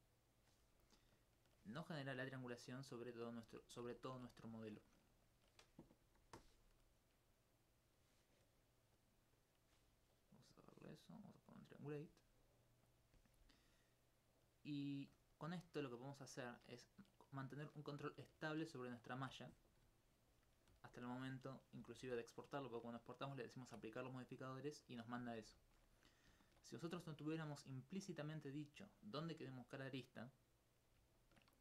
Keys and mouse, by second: 3.0 right click, 7.5 click, 13.6 alt+click, 14.1 alt+click, 18.2 alt+click, 19.4 middle click, 20.6 click, 21.8 g, 22.0 y, 22.6 click, 28.5 right click, 29.0 alt+click.